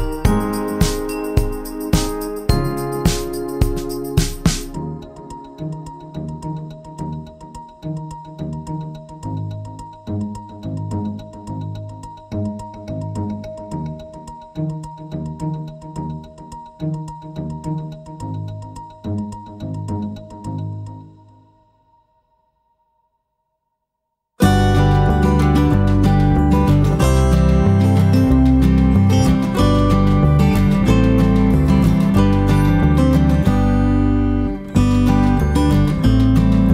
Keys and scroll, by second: 7.3 -, 7.8 space, 10.1 typing, 11.7 ctrl+d, 17.3-18.0 typing, 20.6 shift+F6, 27.8 F1, 31.4 shift+F6, 32.8 BackSpace.